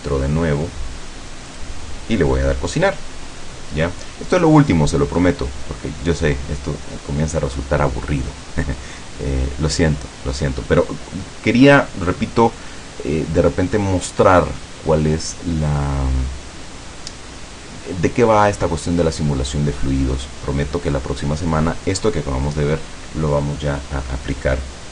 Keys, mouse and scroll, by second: 1.6 click.